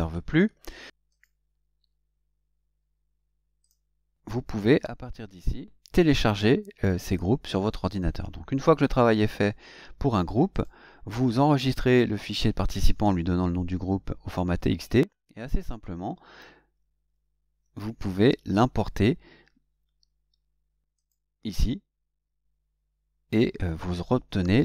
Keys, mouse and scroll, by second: 1.1 click, 3.6 click, 10.5 click, 21.0 click.